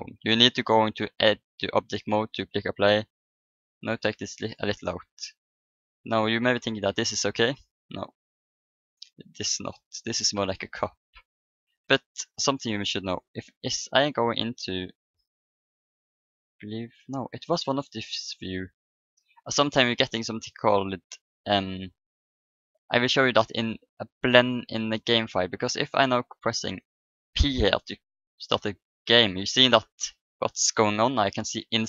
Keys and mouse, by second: 1.4-3.2 drag, 3.1 s, 6.4-8.4 middle drag, 8.5-10.2 drag, 10.2 middle click, 10.5-12.4 middle drag, 13.4 click, 14.4 middle click, 14.7-16.7 drag, 16.8-18.0 middle drag, 17.7-19.7 drag, 17.7 right click, 19.1-20.3 middle drag, 20.3-22.1 drag, 21.4-23.6 middle drag, 22.0 right click, 23.8-25.7 drag, 26.1-27.9 drag, 28.5 b, 31.5 p.